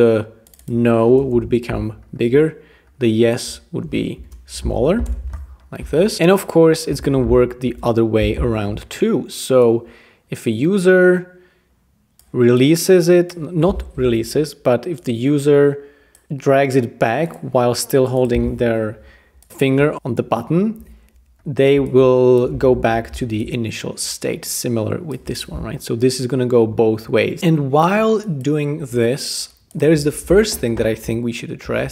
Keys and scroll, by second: 1.1-2.2 typing, 3.9-5.5 typing, 7.7 super+d, 8.5 shift+v, 14.2 Return, 16.3 Return, 19.9 Page_Down, 19.9 Return, 22.8 shift+v, 31.6 super+v.